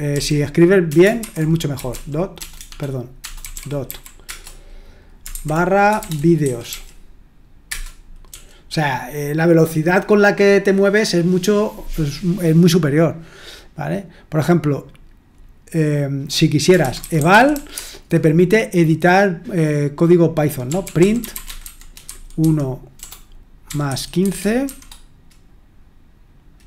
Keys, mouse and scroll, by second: 0.0-0.1 typing, 1.2-8.3 typing, 16.7-18.2 typing, 20.6-24.6 typing.